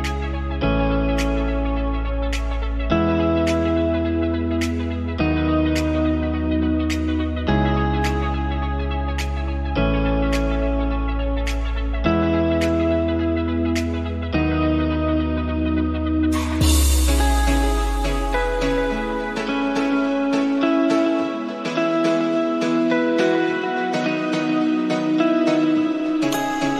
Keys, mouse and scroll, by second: 1.0-2.4 right drag, 2.4 click, 2.7-3.8 middle drag, 3.8 Tab, 3.9 middle click, 4.3-7.0 drag, 7.0-8.0 middle drag, 8.0-10.4 drag, 10.5-12.8 drag, 13.1-14.5 drag, 14.7-16.5 drag, 16.6 shift+middle click, 16.8-17.8 right drag, 17.8-18.3 scroll up 1, 18.7-22.1 drag, 24.5-26.7 drag.